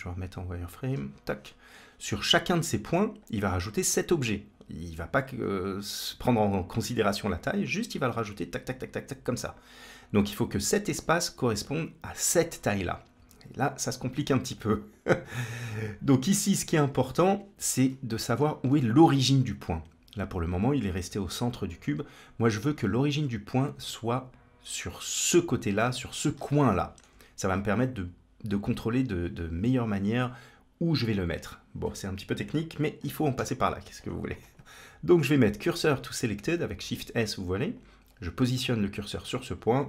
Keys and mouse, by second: 3.1 click, 15.1 click, 15.3 Tab, 16.8 z, 17.8 middle click, 18.6 middle click, 22.6 1, 22.8 click, 25.6 middle click, 26.5 shift+middle click, 33.2 shift+s, 36.6 shift+s, 39.4 Tab.